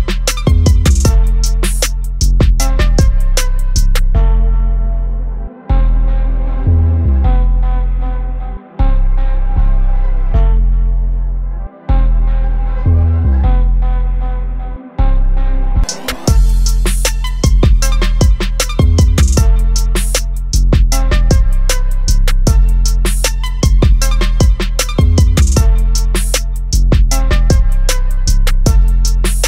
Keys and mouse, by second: 2.0 click, 8.4 click, 15.1 click, 16.9 click, 22.4 click.